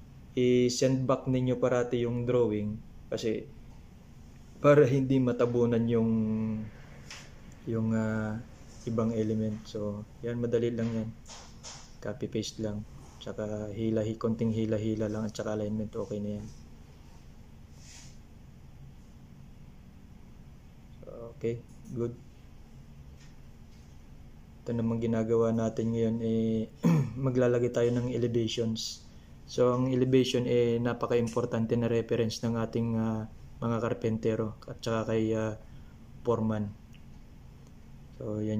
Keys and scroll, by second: 4.8 Left, 6.9 ctrl+c, 11.5 ctrl+v, 17.9 Left, 18.1 Left, 18.4 Left, 22.7 ctrl+c.